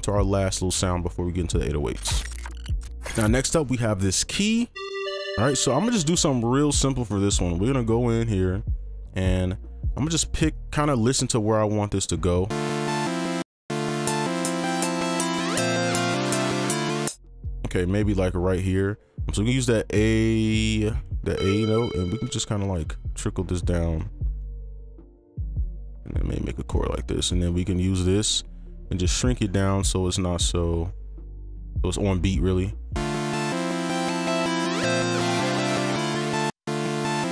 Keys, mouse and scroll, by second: 4.8 double click, 7.3 right click, 9.1-11.2 scroll up 1, 12.5 space, 13.4 space, 17.0 space, 22.0 ctrl+click, 23.8 shift+click, 24.5 shift+click, 26.7 ctrl+click, 31.6-32.8 scroll up 1, 36.4 space, 36.6 space.